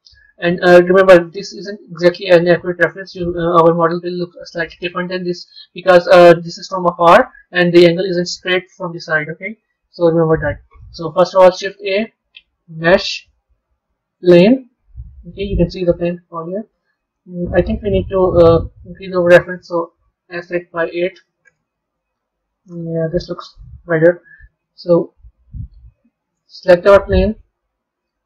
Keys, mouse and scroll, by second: 1.6-4.6 middle drag, 9.5 KP_3, 11.5 shift+a, 14.9-18.0 middle drag, 18.2 click, 19.8 s, 22.3-23.6 scroll down 8, 27.2 click.